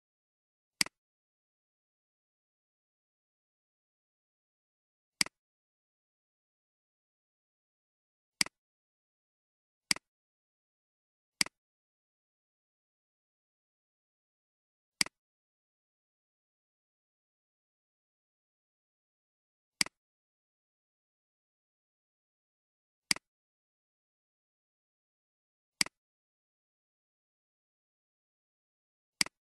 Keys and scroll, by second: 2.6-3.4 typing, 12.6-14.0 typing, 16.3-19.0 typing, 21.3-22.0 typing, 23.8-24.5 typing, 27.5-28.1 typing.